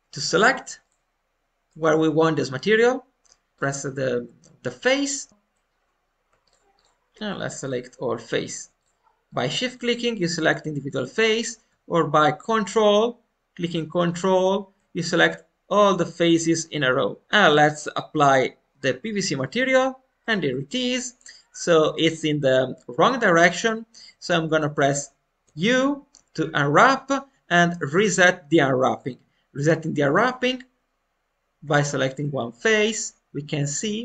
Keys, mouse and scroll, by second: 0.8 click, 1.6-3.5 middle drag, 3.5 ctrl+click, 4.9 click, 6.4 shift+click, 11.0-13.1 shift+drag, 14.0 ctrl+click, 17.2 middle click, 17.9-20.1 drag, 20.1-22.4 middle drag, 23.4 alt+middle click, 24.2 scroll down 1, 24.5 shift+middle click, 25.4 u, 30.1-31.9 drag, 31.9-33.2 shift+middle drag.